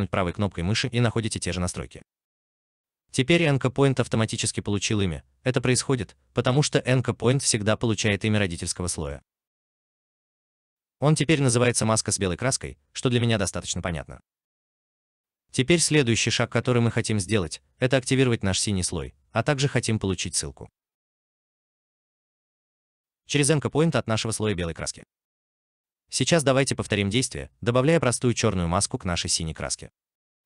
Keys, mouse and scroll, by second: 17.8 alt+click.